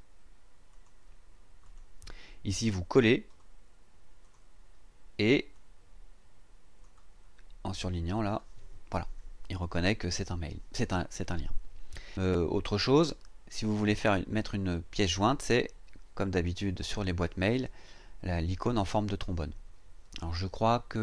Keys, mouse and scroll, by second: 0.7 click, 1.6 click, 3.3 right click, 4.2 click, 5.5-7.0 drag, 8.1 click.